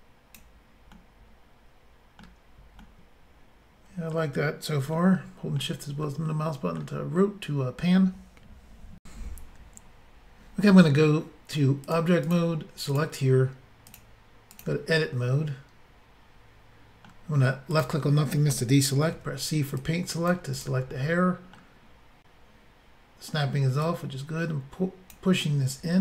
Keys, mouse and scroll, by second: 1.0 middle click, 2.8 middle click, 5.0 shift+middle click, 6.1 middle click, 9.0 Insert, 11.9 click, 12.3 click, 12.9 click, 13.9 click, 14.0 click, 14.5 click, 14.6 click, 15.1 middle click, 17.7 click, 19.2 c, 19.8 click, 20.6 right click, 20.9 middle click, 23.8 click, 25.4 middle click.